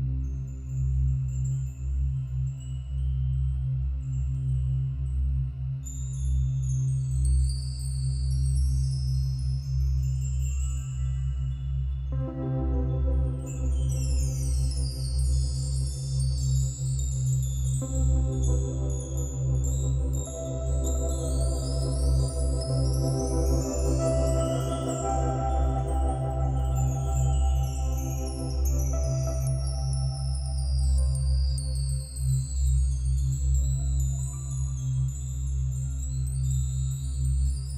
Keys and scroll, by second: 5.9 ctrl+d, 7.5 ctrl+-, 8.4 ctrl+-, 9.1 ctrl+=, 10.3 ctrl+alt+shift+n, 10.4 ctrl+alt+g, 14.8 ctrl+-, 14.9 ctrl+=, 17.5 ctrl+-, 18.5 ctrl+-, 18.6 ctrl+=, 18.7 ctrl+-, 21.6 ctrl+alt+shift+n, 25.1 ctrl+-, 25.1 ctrl+=, 25.4 space, 33.1 ctrl+d.